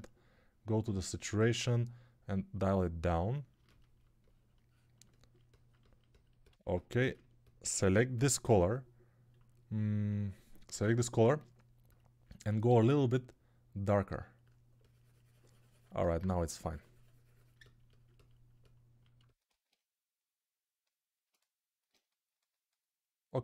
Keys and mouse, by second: 8.3 s, 10.6 s, 13.6-15.8 right drag.